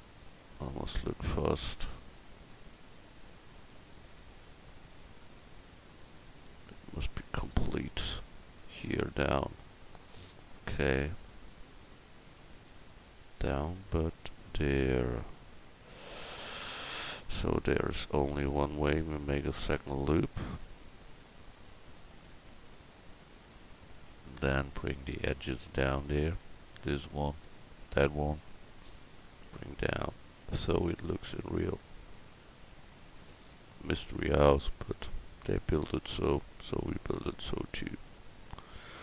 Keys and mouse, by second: 0.8-3.0 middle drag, 3.0 KP_1, 18.4 ctrl+r, 25.8-32.3 drag, 26.9-29.6 right drag, 33.3-35.6 drag, 36.2-38.1 middle drag, 37.3 a, 38.2 middle click.